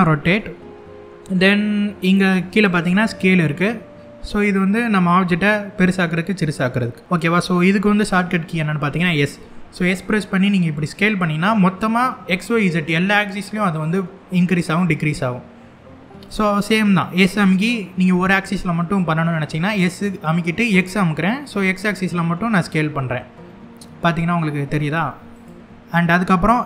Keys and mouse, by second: 2.3 click, 5.4-7.0 drag, 9.0 s, 15.9 right click, 16.8 s, 20.3 x, 25.0 click, 26.5 s.